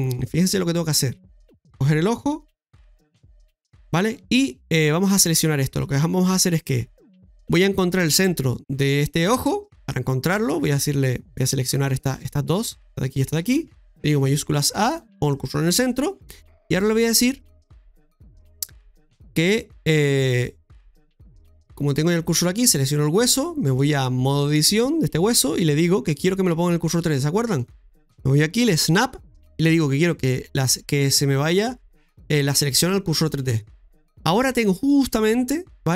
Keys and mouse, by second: 1.3 click, 2.8 KP_Divide, 3.9 middle click, 5.4 Tab, 9.8 click, 10.8 alt+shift+right click, 11.4 alt+shift+right click, 11.9 right click, 12.2 alt+shift+right click, 12.6 alt+shift+right click, 13.2 alt+shift+right click, 14.1 shift+s, 18.9 right click, 20.2 click, 23.3 click, 23.9 click, 27.6-33.4 drag, 34.4-35.9 middle drag.